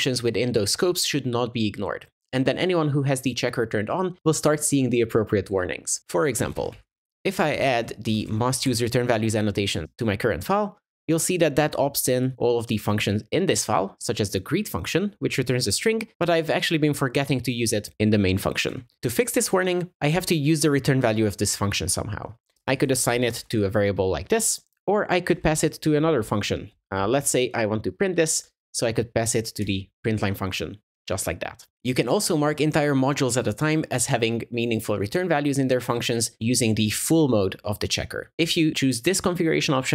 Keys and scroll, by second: 8.7 Tab, 29.7 Escape.